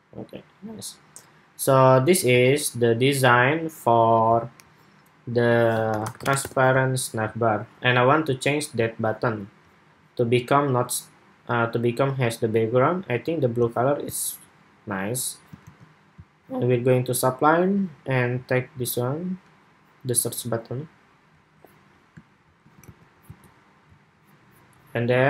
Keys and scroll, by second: 15.3 super+c, 22.6 super+v, 23.0 super+s.